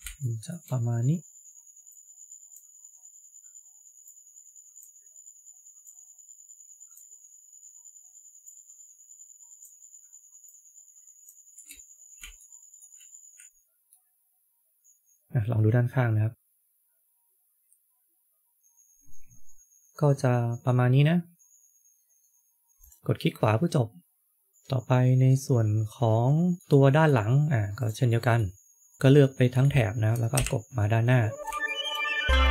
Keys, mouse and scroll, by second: 0.1 shift+middle click, 11.9-12.3 scroll up 3, 12.3 shift+middle click, 13.6 scroll down 3, 13.8 middle click, 22.7 middle click, 23.1 middle click, 26.5 middle click, 27.7 middle click, 28.0 click, 28.9 shift+middle click, 29.1 middle click, 29.4 shift+middle click, 30.2 KP_1, 31.1 scroll up 2, 31.5 shift+middle click.